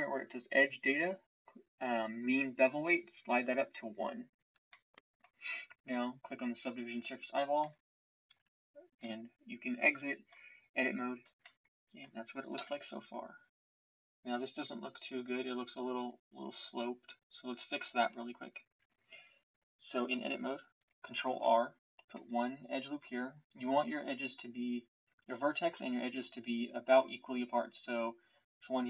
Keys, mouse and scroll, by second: 8.3 Tab, 12.5 KP_1, 18.1 Tab, 21.2 ctrl+r.